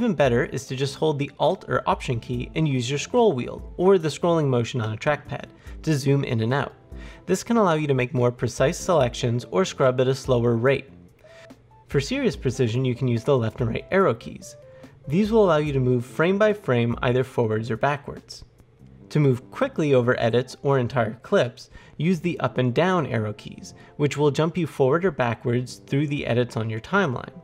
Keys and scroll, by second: 2.2-3.2 alt+scroll, 11.2 Left, 11.3 Up, 11.3 Down, 11.3 Right, 13.4 Left, 13.8 Right, 21.5 Up, 21.5 Down, 22.4 Up, 22.7 Down.